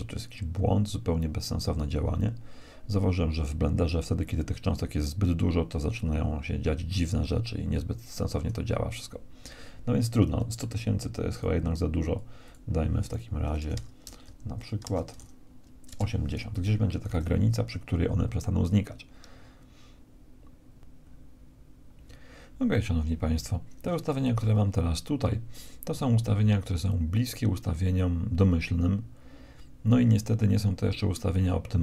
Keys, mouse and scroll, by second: 9.6 Escape, 10.1-12.0 drag, 13.3 BackSpace, 16.7 alt+a, 20.8-22.2 middle drag, 23.4 alt+a.